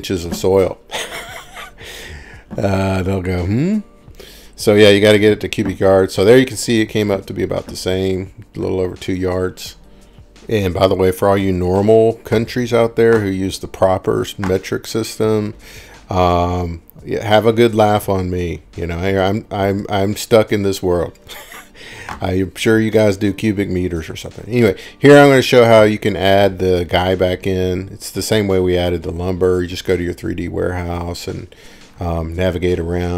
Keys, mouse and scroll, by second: 2.9 scroll, 3.6 click, 5.0-5.6 scroll down 5, 6.6 middle click, 6.8 scroll down 2, 7.3-8.6 scroll, 9.3 click, 10.5 click, 19.5-21.9 drag, 22.2 scroll, 23.3 scroll, 23.5-24.1 scroll down 1, 24.3 scroll down 1, 26.7 click, 27.6 scroll, 31.1 click.